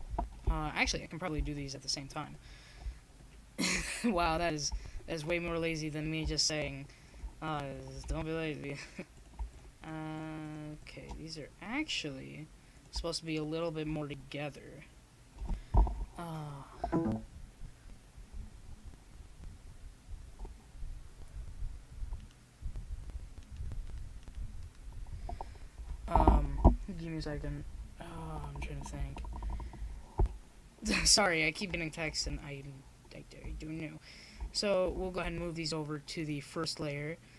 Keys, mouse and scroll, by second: 1.4-3.4 drag, 6.8-9.3 drag, 14.2-16.3 drag, 16.3-21.8 middle drag, 21.8-23.8 drag, 24.3 ctrl+i, 25.9-31.2 drag, 31.8 shift+z.